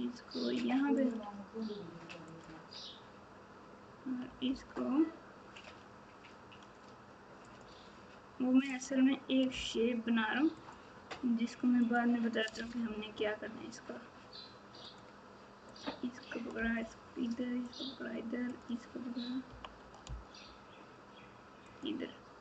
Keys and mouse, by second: 4.4 g, 9.5 g, 11.8 click, 16.5 g, 18.5 click.